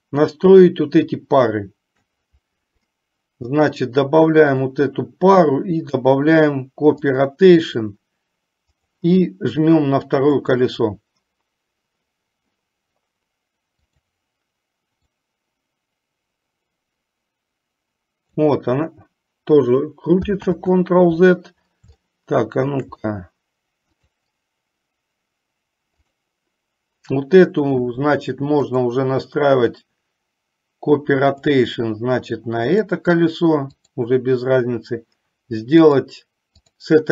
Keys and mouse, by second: 0.0 click, 4.6-7.4 drag, 14.0 click, 15.4-18.7 drag, 20.7 ctrl+z, 22.2-23.0 shift+middle drag, 24.1 click, 26.2 click, 28.8-31.8 drag, 36.0-37.1 drag.